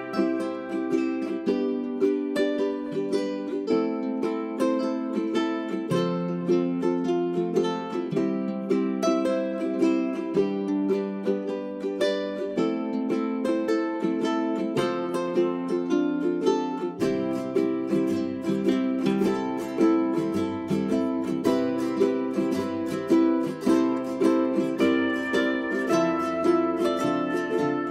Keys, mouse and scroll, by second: 2.9 space, 5.9-8.2 drag, 10.0 ctrl+click, 10.6 ctrl+click, 11.3 ctrl+Page_Down, 11.7 ctrl+Page_Down, 11.9 ctrl+Page_Down, 12.1 ctrl+Page_Down, 14.2 j, 14.6 click, 15.7-16.3 scroll down 2, 15.9 click, 17.1-17.4 scroll up 1, 17.7 click, 19.3 ctrl+click, 20.8 scroll up 1, 21.6 scroll down 1, 21.8 click, 22.5-22.9 scroll up 1, 22.9 middle click, 23.7 scroll down 1, 23.9 click, 24.9-26.1 scroll up 1, 26.1 w, 26.2-26.5 scroll up 1, 26.5 click.